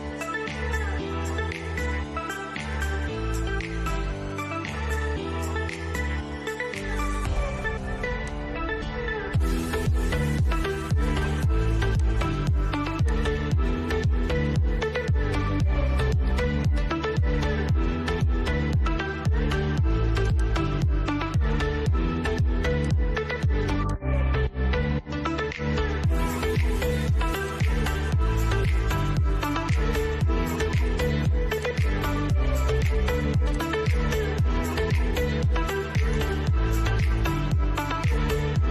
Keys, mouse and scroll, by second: 2.0-2.5 scroll up 1, 4.4 scroll down 1, 5.2-5.7 scroll down 1, 5.7 middle click, 7.4-11.2 drag, 15.5 click, 19.5 click, 22.0 click, 24.0-24.4 scroll down 1, 24.8-26.7 shift+middle drag, 26.7 click, 28.9-30.8 shift+middle drag, 30.8 click, 35.4 click.